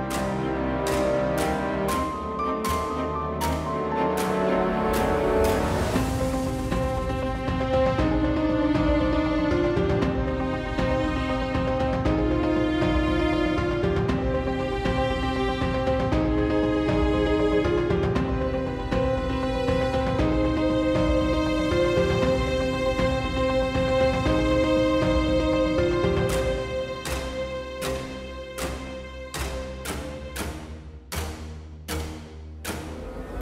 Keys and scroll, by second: 1.4 1, 3.4 g, 9.2 3, 19.3 g, 24.2 ctrl+r, 27.5 s.